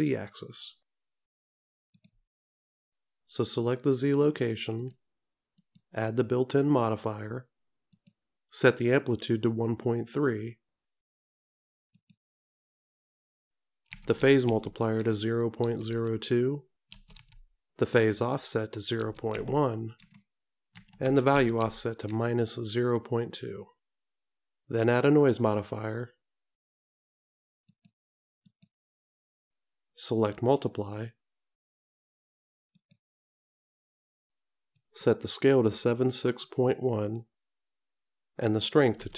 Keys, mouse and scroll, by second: 5.7 click, 8.0 click, 12.2 click, 28.6 click, 32.9 click, 37.1 click.